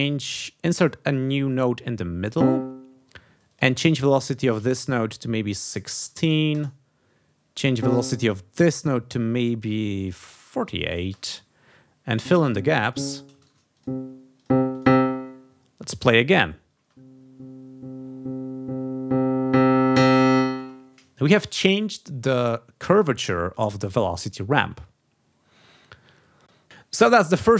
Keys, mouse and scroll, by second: 3.5 click, 4.6-6.5 typing, 6.5 Return, 7.8 click, 8.6 v, 10.2 4, 10.6 8, 11.1 Return, 12.1 click, 12.4 click, 12.8 click, 13.4 shift+right click, 13.7 shift+click, 14.4 click, 14.7 click, 16.8 space, 20.5 space.